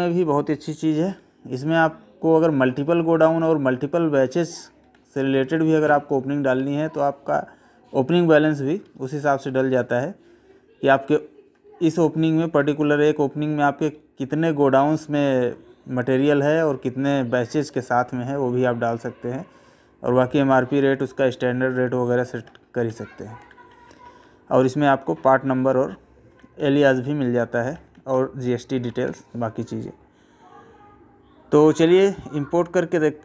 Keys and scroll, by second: 1.2 Right, 4.8 Left, 5.2 Right, 8.8 Right, 11.4 Left, 13.9 Right, 16.4 Right, 20.6 Right, 21.5 Left, 24.8 Right, 26.3 Left.